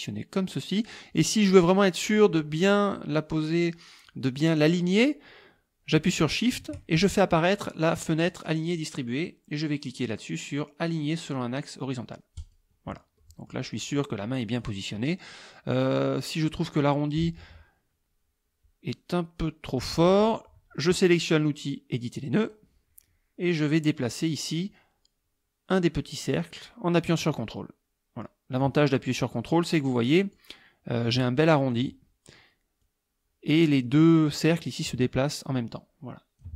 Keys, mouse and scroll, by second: 6.4 shift+click, 8.4 click, 12.4 click, 13.2 middle click, 13.9 click, 14.6 click, 22.4 click, 27.4-30.6 ctrl+drag, 31.2 ctrl+click, 32.8 click, 34.9-36.5 ctrl+drag.